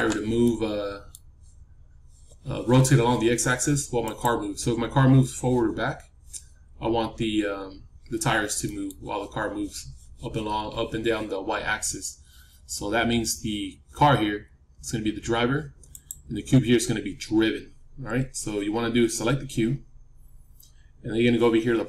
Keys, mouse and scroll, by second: 0.3-2.3 middle drag, 3.9-6.1 drag, 8.6-11.9 middle drag, 15.8-17.8 drag, 16.5-20.9 middle drag.